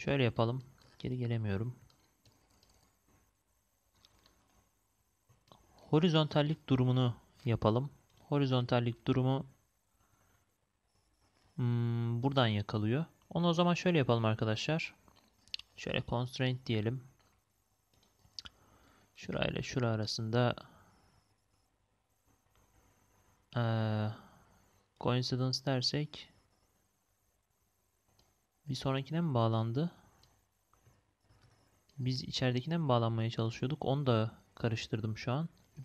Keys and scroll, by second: 31.2 ctrl+z.